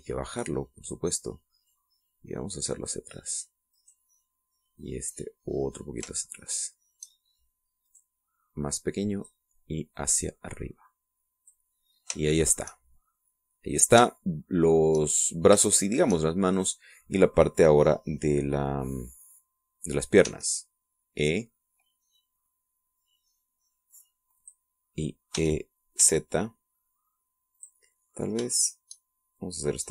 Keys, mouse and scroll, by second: 0.0 right click, 0.8-2.0 drag, 2.6-4.0 drag, 4.7 right click, 5.7-6.9 drag, 7.1 shift+middle click, 8.8 right click, 9.6 click, 10.9-12.7 drag, 12.7-13.1 scroll down 2, 13.2 shift+middle click, 15.1 shift+middle click, 16.7 shift+middle click, 17.5 shift+right click, 21.2 e, 25.3 click, 26.3 e, 28.5 click, 29.5 shift+right click.